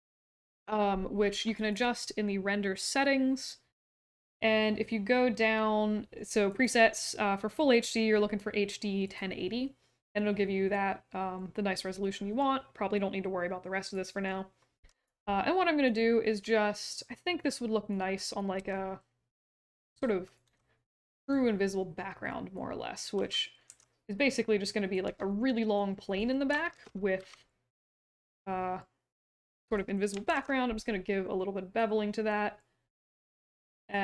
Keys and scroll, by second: 18.5 e, 20.4 r, 23.1 w, 23.6 r, 25.0 q, 26.7 ctrl+e, 27.1 w, 30.2 ctrl+b.